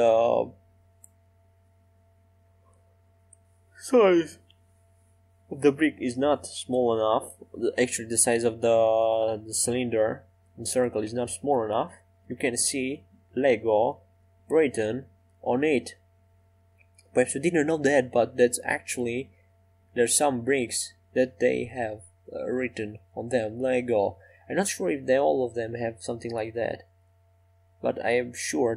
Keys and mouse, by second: 1.0 right click, 1.4 e, 6.3-8.5 middle drag, 8.5 e, 12.0 middle click, 12.5 middle click, 14.2 middle click, 14.7 middle click, 16.0-19.4 right drag, 19.4 e, 22.0 e, 25.5-26.6 right drag, 26.6-27.7 middle drag, 28.0 middle click, 28.2 right click, 28.4-28.7 middle drag.